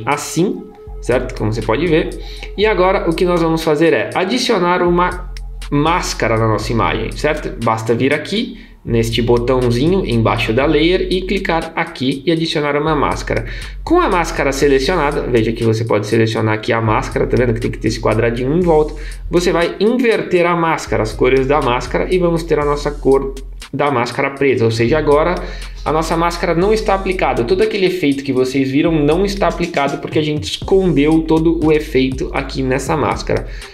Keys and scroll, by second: 21.1 super+1.